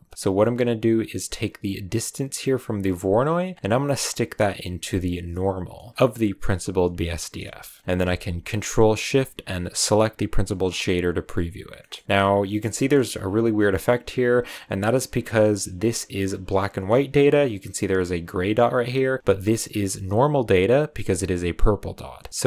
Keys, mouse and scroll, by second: 0.0 middle click, 0.1 scroll up 3, 0.3-2.8 middle drag, 2.8 click, 5.6 scroll down 1, 5.7-6.5 middle drag, 6.5 click, 10.3 ctrl+shift+click, 11.5-12.6 scroll down 2, 11.7 middle click, 12.6 scroll down 1, 12.7 shift+middle click, 12.9-13.5 shift+scroll up 3, 13.5-14.1 scroll up 1, 14.1-16.2 scroll up 2, 14.7 middle drag, 16.2 click.